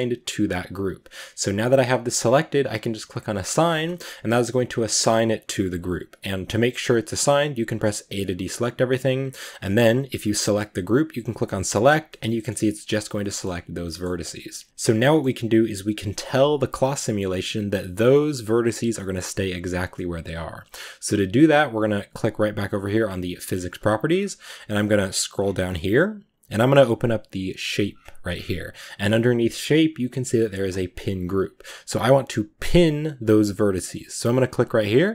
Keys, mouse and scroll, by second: 1.2 g, 3.4 click, 3.7-7.8 middle drag, 7.8 a, 10.1-11.9 drag, 11.9-14.3 middle drag, 14.3 Tab, 14.5-35.1 middle drag.